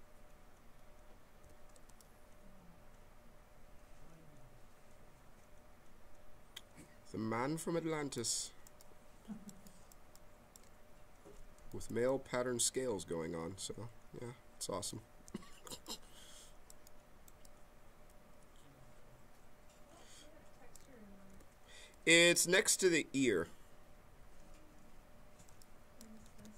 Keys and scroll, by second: 1.4 q, 15.2 q, 21.3 q, 26.2 z.